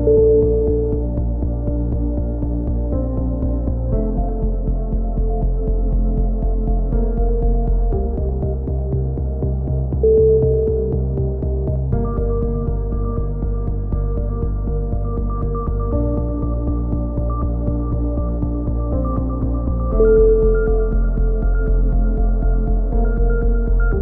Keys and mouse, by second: 0.1 k, 1.8 right click, 2.2 click, 2.5 right click, 3.3 click, 4.5 a, 4.6 k, 7.3 a, 7.4 Tab, 7.7 click, 9.9-12.1 drag, 12.1 Tab, 12.6 click, 12.7 right click, 12.8 KP_3, 13.3 e, 13.6-16.2 drag, 14.0 z, 15.9 a, 16.0 z, 16.3 click, 16.6 ctrl+z, 16.7 KP_1, 17.1 click, 17.9 click, 18.1 z, 18.3 a, 18.4 z, 18.5 click, 20.2 right click, 21.1 f, 21.2 a, 21.5 right click, 21.6 KP_3, 21.9 click, 22.3 click, 23.1-24.0 drag, 23.8 a, 23.8 z.